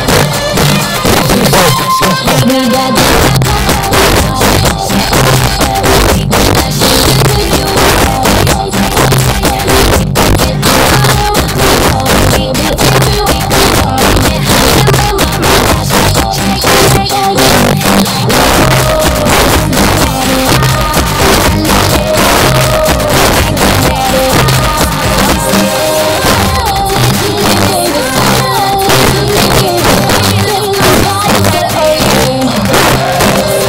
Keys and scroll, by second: 16.3 Page_Down, 32.8 Page_Down.